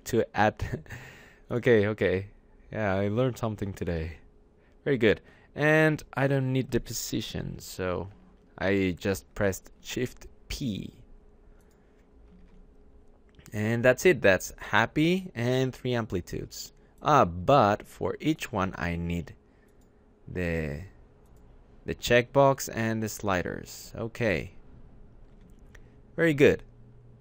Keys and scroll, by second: 7.6 shift+p, 12.4 alt+Tab, 25.4 `, 26.4 alt+Tab.